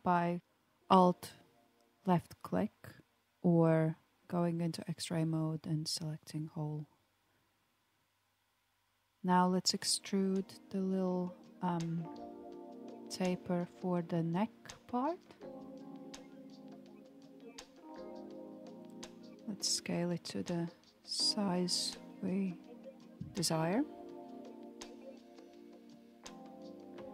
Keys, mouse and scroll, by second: 3.1 Tab, 4.1 click, 5.0 Tab, 6.7 alt+click, 8.3 g, 9.5 middle click, 10.3 alt+click, 12.1 KP_1, 13.8 e, 19.1 click, 21.1 alt+z, 21.7 click, 23.8 s.